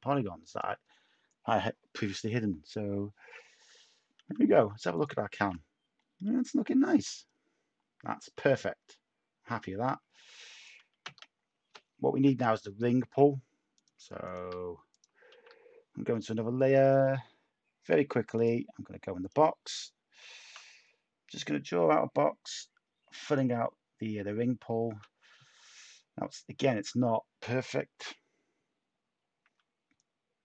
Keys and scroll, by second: 4.7-5.4 typing, 11.0 Tab, 15.3 a.